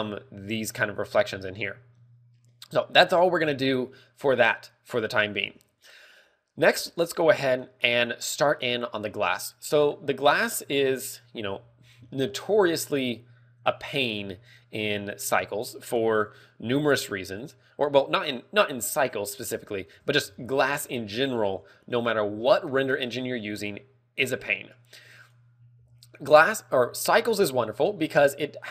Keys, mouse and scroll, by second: 5.9 ctrl+w, 25.6 click, 27.4 z, 28.0 z.